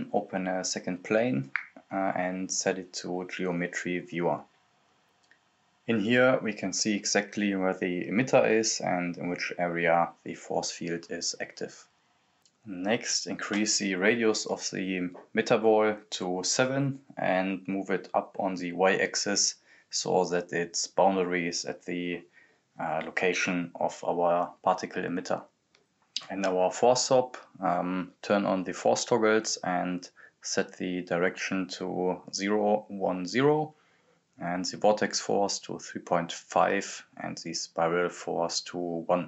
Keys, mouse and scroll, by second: 0.6 click, 4.4 scroll down 1, 5.2-7.2 right drag, 7.2-11.2 drag, 11.6-16.8 drag, 16.8 scroll down 1, 17.4 right click, 18.5-21.3 drag, 21.3-23.7 right drag, 25.5 click, 27.7 click, 31.6-33.8 drag, 34.4-39.2 drag.